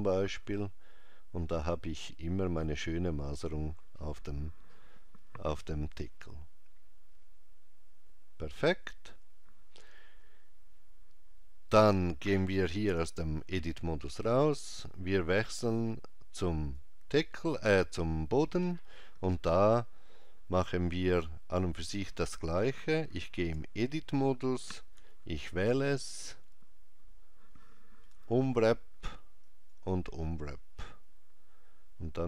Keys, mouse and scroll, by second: 12.9 Tab, 16.5 click, 23.4 Tab, 25.0 a, 28.2 u.